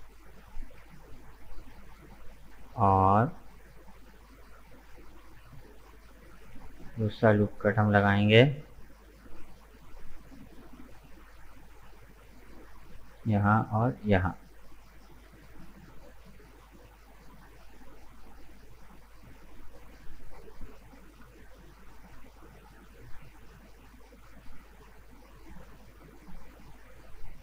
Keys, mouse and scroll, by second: 4.7-8.0 middle drag, 8.0 k, 16.8-19.8 middle drag, 26.2 middle click, 27.0 right click.